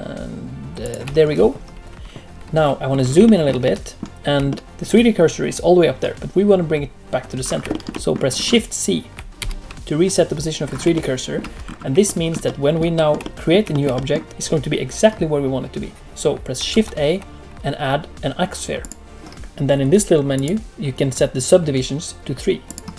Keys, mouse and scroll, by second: 2.8 scroll up 3, 3.2 shift+middle click, 3.6 middle click, 4.4 shift+middle click, 7.4 scroll up 3, 7.7 shift+middle click, 7.9 middle click, 8.3-9.1 scroll up 1, 9.1 scroll up 1, 9.3 shift+c, 10.6-10.9 scroll up 2, 10.9 shift+middle click, 11.6-12.0 scroll up 2, 12.0 shift+middle click, 12.4 middle click, 12.9 shift+middle click, 13.2 middle click, 13.7 shift+middle click, 13.9 middle click, 16.7 shift+a, 20.3 click.